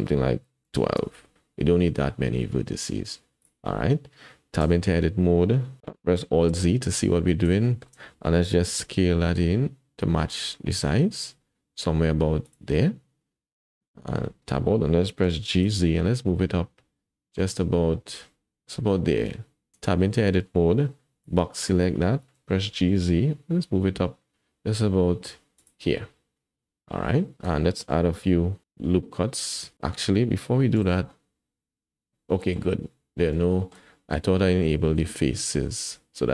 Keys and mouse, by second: 3.4 click, 4.6 Tab, 6.5 alt+z, 7.6 shift+click, 8.8 s, 14.2 Tab, 15.2 g, 21.4 Tab, 21.4 click, 22.6 g, 30.8 alt+z, 31.1 click, 31.2 middle click, 32.2 click, 32.3 middle click, 32.4 click, 33.5 shift+click, 34.0 click, 35.3 click, 35.9 middle click.